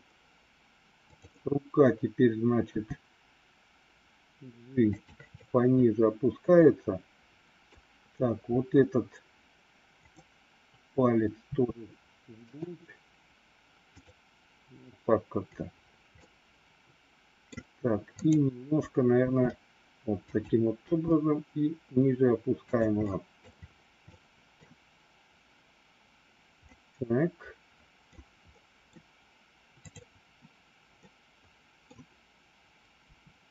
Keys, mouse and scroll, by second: 2.6 g, 5.2-7.6 middle drag, 10.0 click, 11.4 r, 13.8 click, 16.1-17.4 middle drag, 18.2 click, 19.1 r, 20.7 g, 22.9 scroll up 1, 23.1 middle click, 24.1 middle click, 26.6 scroll up 1, 26.8-28.1 middle drag, 28.1 scroll down 2, 28.4 middle click, 29.8 click, 31.1 middle click, 33.0 r.